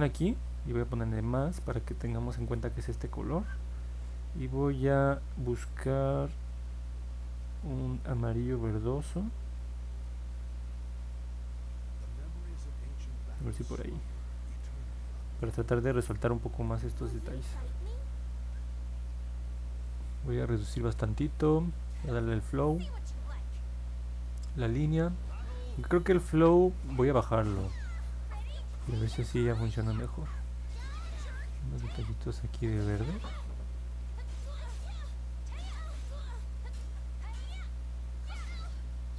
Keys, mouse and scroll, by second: 5.0-8.9 drag, 22.2 click, 23.9-25.1 drag, 26.5-27.7 drag, 31.2 click, 32.1 click, 32.6 click, 33.0 click, 33.5 click, 34.1 click, 34.5 click, 36.4 click, 36.9 click, 37.5 click, 38.0 click, 38.5 click, 39.0 click.